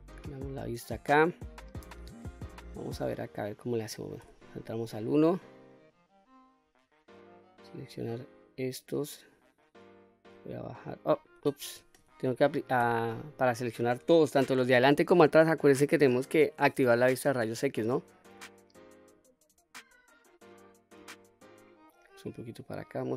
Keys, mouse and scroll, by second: 4.0 1, 7.8-9.1 drag, 10.1 click, 11.6 ctrl+z, 12.6 q, 17.6-18.7 drag, 19.5-21.6 drag, 22.3 click.